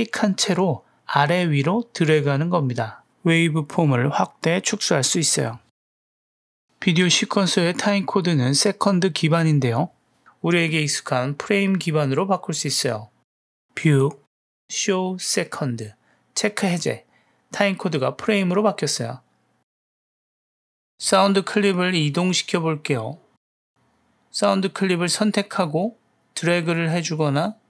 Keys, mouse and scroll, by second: 5.3 click, 6.2-6.6 drag, 8.9 click, 13.1-17.5 drag, 20.8 space, 21.1 space, 21.3 middle click, 22.7 ctrl+middle click, 23.3 middle click, 23.8 click, 24.5-25.9 drag, 26.3 middle click, 26.8-27.1 drag.